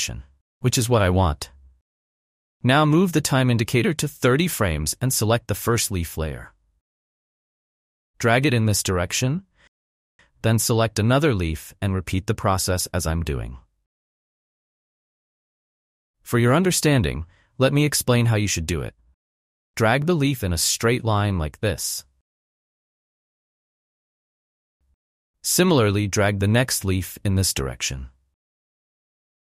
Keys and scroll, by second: 16.0 F1, 29.2 F1.